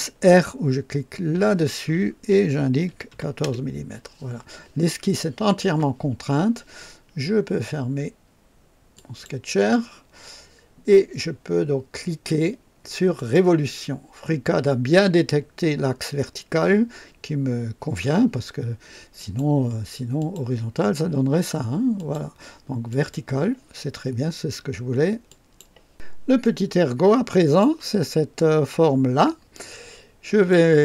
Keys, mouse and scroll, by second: 1.3 r, 2.8 KP_1, 2.9 KP_1, 3.1 KP_4, 3.1 KP_4, 3.4 Return, 3.4 KP_Enter, 8.9 click, 13.1 click, 19.1 click, 20.2 click, 22.0 click, 22.9 click, 25.2 click, 25.9 Delete, 26.4-27.8 drag, 29.5 click.